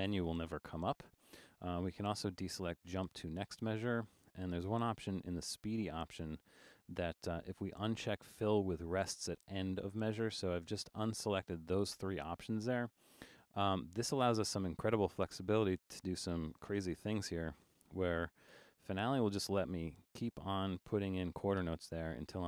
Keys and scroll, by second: 16.5 5.